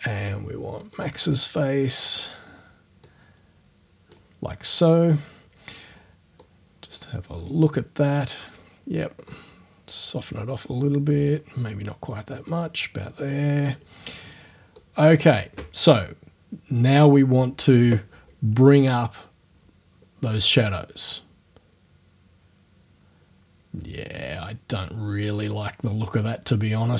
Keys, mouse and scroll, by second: 0.8 click, 3.1-4.3 drag, 6.4 click, 7.4 click, 9.3-12.7 drag, 13.6 click, 14.8 click, 17.1 click, 20.5-26.9 drag.